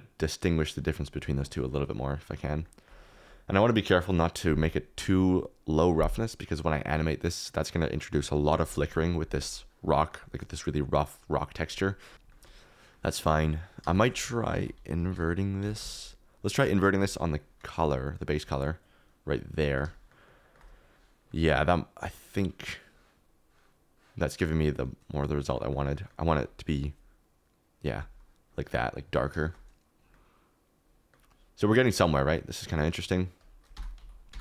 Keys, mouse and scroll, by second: 1.9 middle click, 10.1-11.5 middle drag, 12.1 click, 12.1 typing, 12.3 shift+middle click, 13.8 shift+a, 18.7 typing, 19.6 shift+middle click, 20.6 middle click, 22.4 click, 25.7 middle click, 29.4 shift+middle click, 31.0 click, 32.2 middle click, 32.9 middle click, 33.7 Tab, 34.0 a, 34.3 Tab.